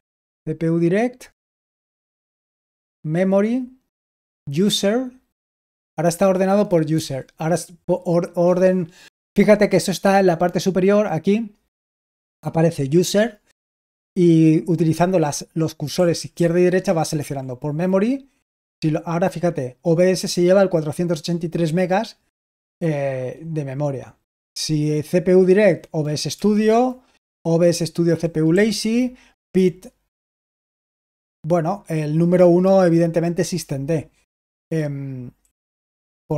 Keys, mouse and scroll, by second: 0.1 typing, 2.7 Left, 6.9 r, 15.9 Right, 16.3 Left, 17.1 Right, 18.5 r, 24.2 Right, 26.2 Right, 28.4 Right, 30.2 r, 35.3 Right.